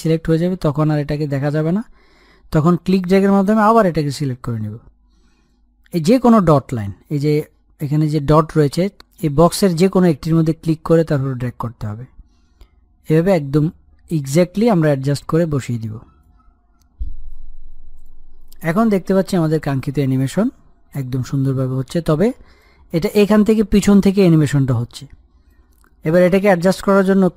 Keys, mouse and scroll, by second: 0.8 click, 4.5-8.5 drag, 11.8-26.9 drag.